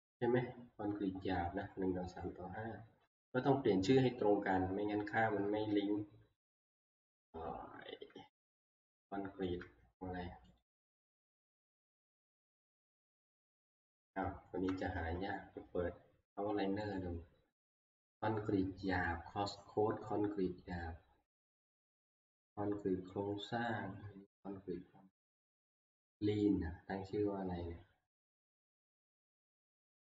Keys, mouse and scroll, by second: 1.9 click, 2.1 click, 3.3 click, 6.8 click, 9.5 shift+middle click, 10.6 click, 14.7 middle click, 14.7 click, 15.0 ctrl+q, 16.9 click, 17.9-18.6 scroll, 24.8-26.1 scroll, 27.4 scroll, 28.3-28.7 scroll.